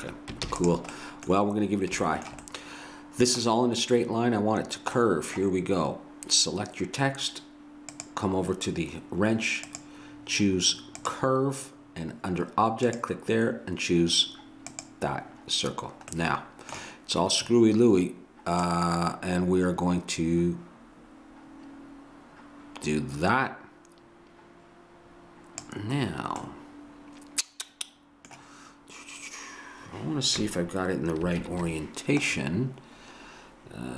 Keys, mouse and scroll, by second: 0.5 ctrl+s, 7.9-9.6 drag, 9.7-11.4 drag, 12.9-14.5 drag, 14.6 click, 16.1-18.7 middle drag, 18.7-20.4 drag, 26.1 middle click, 31.4 ctrl+KP_1.